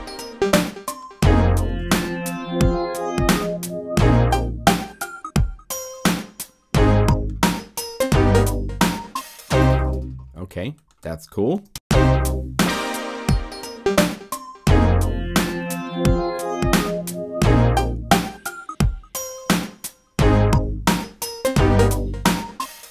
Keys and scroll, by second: 1.8 super+Left, 11.5 0, 11.7 Return.